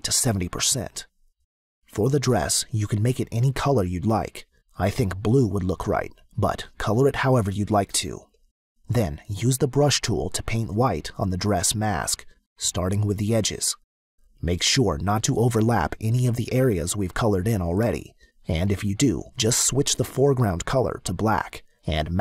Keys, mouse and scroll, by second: 1.4 click, 2.5 click, 3.3 click, 4.0 click, 5.5 click, 7.4 click, 11.1 click, 14.4 click, 20.3 click.